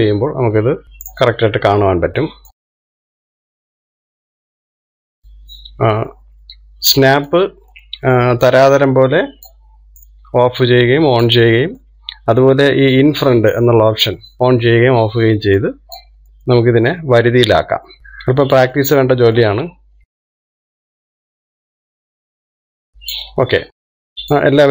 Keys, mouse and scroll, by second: 3.2 click, 5.1 ctrl+z, 6.0 click, 8.5 click, 9.1-10.1 middle drag, 10.1 click, 11.3 click, 12.9-15.8 middle drag, 17.0 click, 17.7 middle click, 18.0 click, 18.8 click, 20.1-21.2 middle drag, 21.2 click, 21.7 click, 22.1 middle click, 22.6 click, 23.6 click, 24.6 scroll down 3, 24.6-24.7 middle drag.